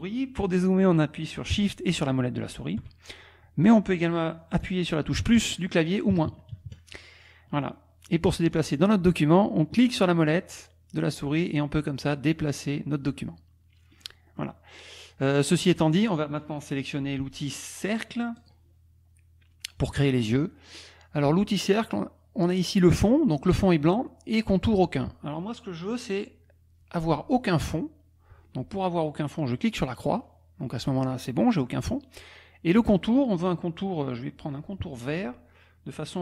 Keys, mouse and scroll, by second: 1.8 shift+click, 2.4 shift+click, 5.2 KP_Add, 6.1 KP_Subtract, 6.5 KP_Add, 7.8 click, 9.7 click, 18.4 click, 29.8 click.